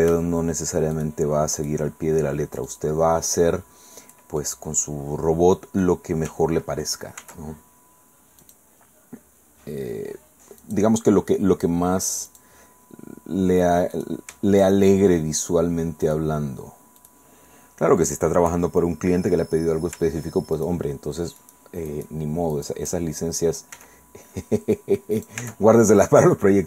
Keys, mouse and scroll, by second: 0.9 shift+right click, 1.6 shift+right click, 2.7 shift+right click, 4.6-6.0 drag, 7.2 ctrl+r, 8.4 click, 10.6 click, 12.3 click, 12.8-13.4 scroll up 1, 13.9 right click, 15.4 shift+right click, 16.0 shift+right click, 17.0 shift+right click, 18.7-19.1 shift+scroll down 3, 19.9 Tab, 20.5 shift+middle click, 21.4 shift+right click, 21.9 shift+right click, 22.5 shift+right click, 23.7 e, 25.2 click, 25.4 Tab, 25.9-26.6 drag.